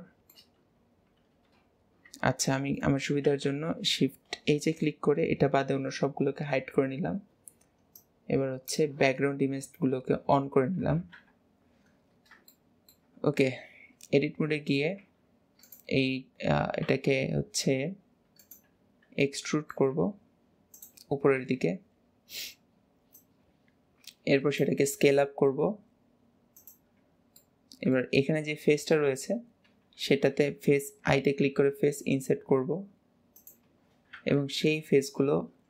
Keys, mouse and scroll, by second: 2.5 scroll down 2, 2.6 scroll up 1, 2.6 scroll down 1, 2.8 middle click, 3.3 alt+z, 4.7 shift+h, 6.4 scroll down 3, 6.6 scroll up 1, 8.0 click, 11.2 KP_1, 12.2 scroll up 1, 12.6-15.1 shift+middle drag, 19.3 middle click, 23.2 click, 27.4-31.1 middle drag.